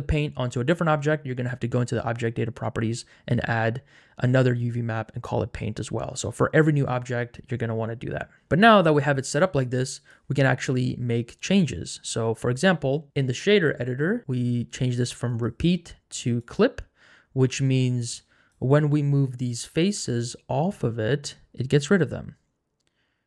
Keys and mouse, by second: 9.6 click, 15.3-16.6 drag, 18.0 click, 19.2 click, 19.9 g.